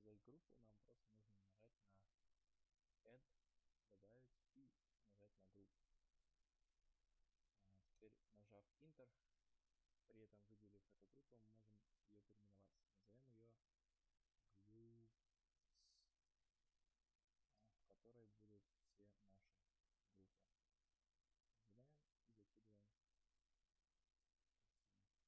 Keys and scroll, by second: 8.3 Return, 17.5 BackSpace, 17.8 Return.